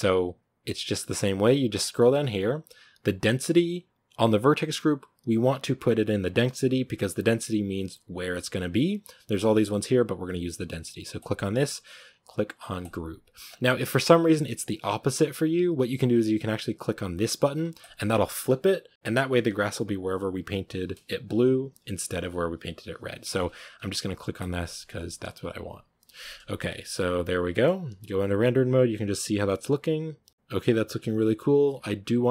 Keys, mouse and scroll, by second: 12.8-13.3 drag, 13.3-13.8 scroll up 5, 13.8-14.2 scroll down 2, 17.7-25.2 drag, 25.2-25.7 scroll up 3, 26.7 shift+middle click, 27.3 scroll down 1, 27.4-27.9 shift+middle drag, 27.9 z, 28.3 a, 31.2 scroll up 7.